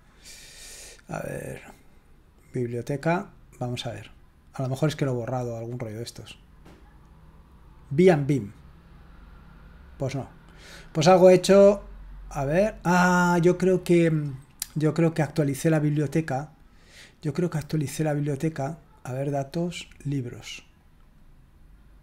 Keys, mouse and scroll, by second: 1.1-3.4 drag, 7.9 click, 10.7 click, 19.1 click, 20.7 click.